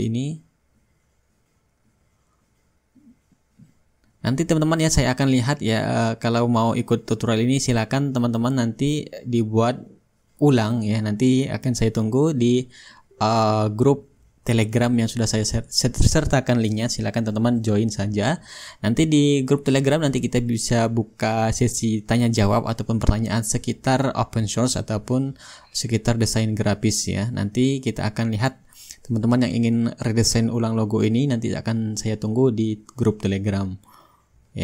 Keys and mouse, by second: 1.9-4.4 shift+right drag, 2.4-4.4 drag, 5.9-7.0 drag, 9.0-10.1 drag, 10.2-13.6 drag, 15.6-16.8 drag, 19.4-21.7 drag, 21.8-22.9 drag, 24.3-25.4 drag, 25.5 click, 28.8-29.9 shift+drag, 31.1-34.6 drag, 31.8 shift+middle click, 32.5-34.6 right drag.